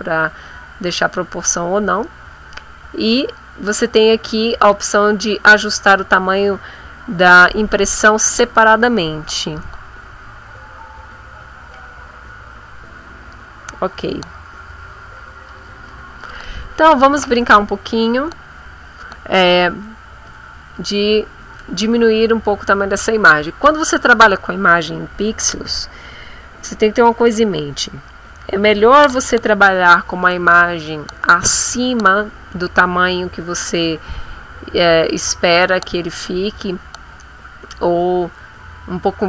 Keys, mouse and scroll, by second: 4.6 click, 21.5 click.